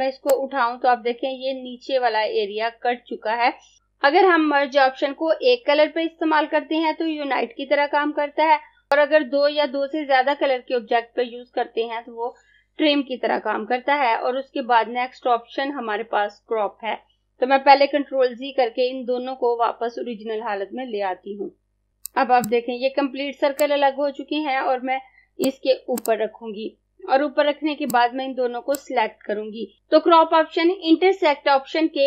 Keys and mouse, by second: 21.5 z, 21.9 click.